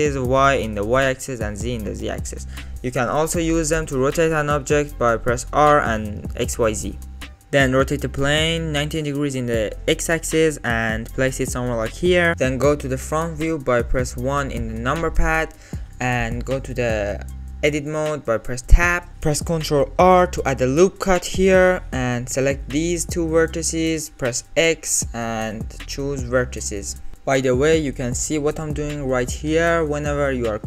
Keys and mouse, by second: 4.0 middle click, 4.9 r, 9.5 g, 12.3-12.9 middle drag, 13.7 KP_1, 18.5 Tab, 20.2 ctrl+r, 22.3 click, 24.8 x, 29.8 a, 30.2 click, 30.5 click.